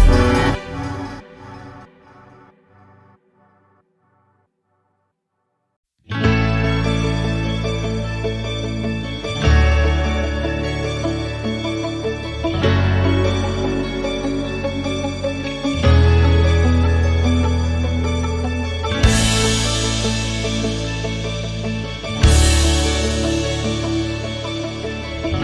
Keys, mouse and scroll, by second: 1.4 click, 2.5-2.9 scroll up 3, 2.9-3.3 shift+middle drag, 3.3-4.1 scroll up 1, 4.1 shift+d, 5.1 r, 7.2-7.7 scroll up 1, 7.7 g, 9.9-10.9 middle drag, 10.9 KP_3, 11.9 click, 12.7-13.3 middle drag, 13.3 scroll up 1, 14.1 click, 15.1-16.5 middle drag, 16.5 s, 18.0 KP_7, 18.8-19.5 middle drag, 19.5 KP_7, 20.2-20.8 shift+middle drag, 20.8 scroll up 2, 21.7 shift+right click, 22.6-24.1 drag, 24.1 s.